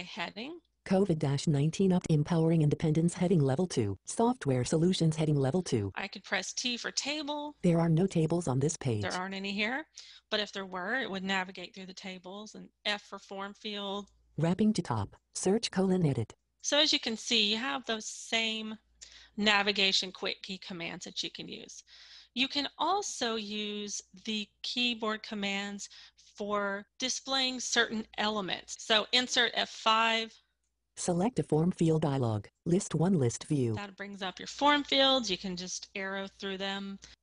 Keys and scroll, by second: 6.3 t, 12.5 f, 28.9 Insert, 28.9 F5.